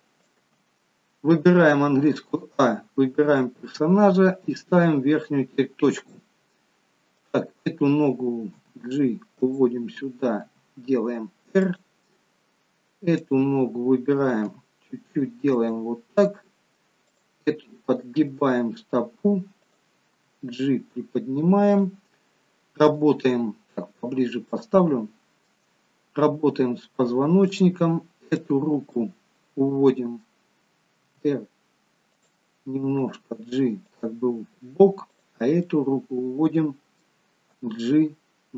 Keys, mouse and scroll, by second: 0.3 KP_3, 0.4 a, 7.2 click, 8.6 g, 10.6 r, 13.2 click, 14.6 g, 17.2 click, 18.3 r, 20.3 g, 23.0 click, 23.6-24.5 scroll up 3, 24.6 shift+middle click, 26.6 r, 28.4 click, 29.0 middle click, 31.2 r, 33.0 g, 35.2 click, 35.7 middle click, 37.6 g.